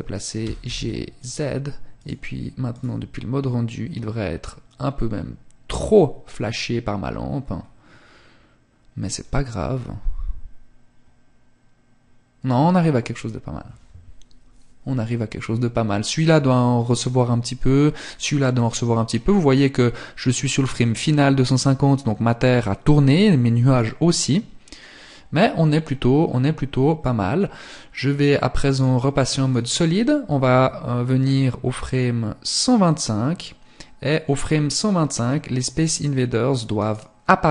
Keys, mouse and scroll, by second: 0.2 click, 1.2 click, 4.3 scroll up 1, 6.5 scroll up 1, 27.7 click, 30.3 click, 35.8 right click, 37.0 middle click.